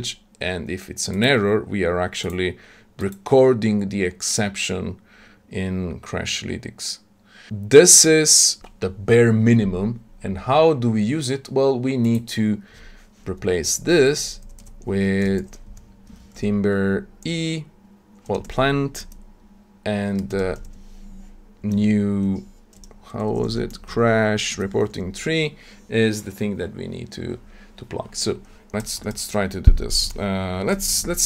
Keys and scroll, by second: 16.1 Tab, 24.5 Tab.